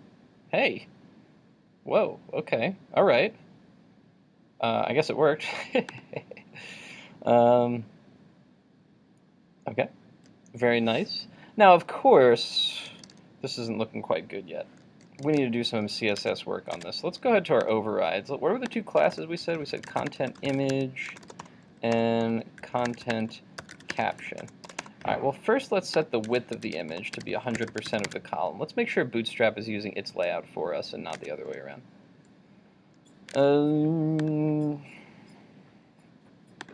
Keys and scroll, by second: 16.2 super+Tab, 27.9 super+s, 28.2 super+Tab, 31.3 super+Tab, 33.4 super+Tab.